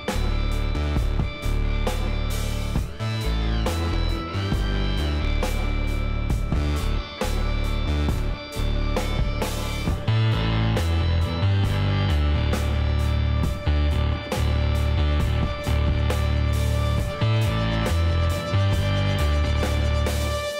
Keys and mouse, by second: 0.9-2.9 middle drag, 2.9-5.7 drag, 4.8 ctrl+KP_Decimal, 7.0 KP_1, 7.6 z, 8.9 click, 13.0-14.6 middle drag, 14.6 s, 14.6 click.